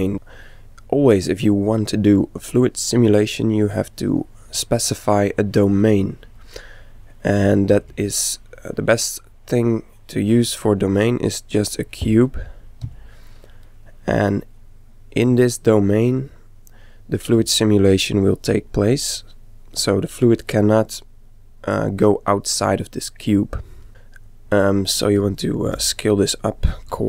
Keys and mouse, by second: 3.4-5.4 middle drag, 7.7 shift+a, 12.7 z, 13.7-15.4 middle drag, 18.6-22.0 middle drag, 23.9 middle click, 24.3 click, 25.7 s, 26.1 click.